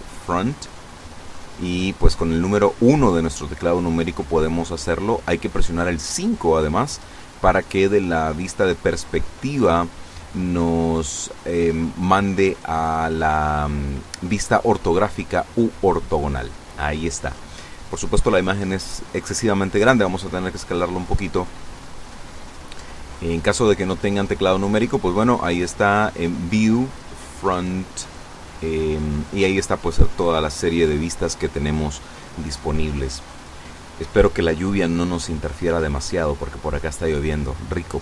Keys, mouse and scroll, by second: 1.1 KP_1, 15.1 KP_5, 21.4 click, 33.8-34.1 scroll down 1, 34.4 scroll up 1, 35.1 scroll down 1, 37.5-38.0 scroll down 3.